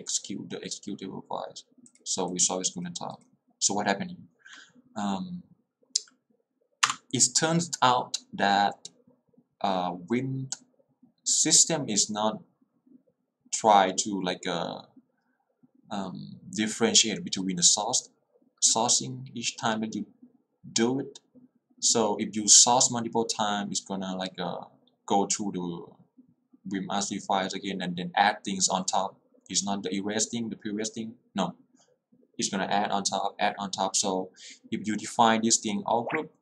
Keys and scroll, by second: 6.9 Return.